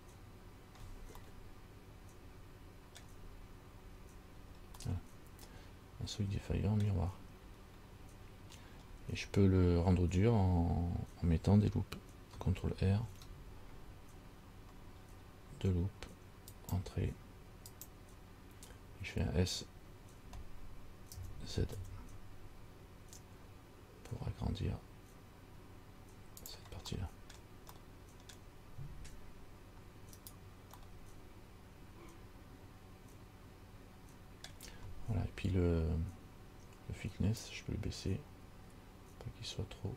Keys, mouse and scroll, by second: 1.5 middle click, 3.8-4.5 scroll up 2, 4.6 scroll down 2, 5.0 middle click, 7.6 scroll up 1, 8.3 scroll up 1, 9.1 scroll down 1, 13.3 ctrl+r, 21.3 s, 30.4 right click, 31.0 middle click, 37.6 click.